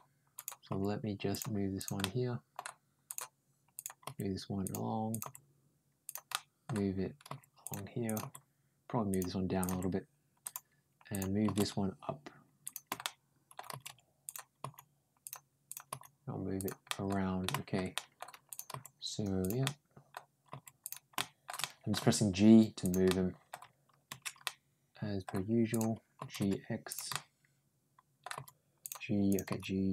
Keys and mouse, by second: 0.2 click, 0.5 g, 1.6 click, 1.8 middle click, 2.9 click, 3.6 click, 3.9 g, 4.9 click, 5.7 g, 6.1 middle click, 7.1 g, 7.9 click, 8.0 g, 9.4 click, 9.5 g, 10.9 click, 11.8 g, 12.8 middle click, 13.5 g, 14.4 g, 15.5 click, 15.7 g, 16.7 middle click, 17.3 shift+middle click, 17.8 middle click, 18.3 click, 18.5 g, 19.4 middle click, 21.0 middle click, 21.0 shift+g, 21.4 middle click, 21.8 g, 22.9 middle click, 24.3 middle click, 25.5 click, 26.0 ctrl+g, 26.9-28.0 middle drag, 28.1 g, 29.1 click, 29.3 g.